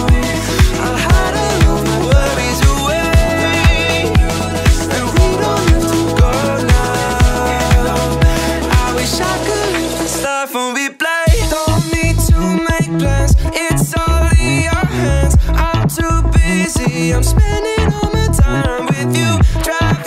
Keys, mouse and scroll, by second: 0.9 click, 2.5 KP_9, 6.6 click, 8.2 click, 9.4 click, 10.5 click, 11.7 click, 12.7 drag, 13.4-13.8 drag, 14.2 click, 15.6 click, 16.5-18.5 middle drag, 18.9 click.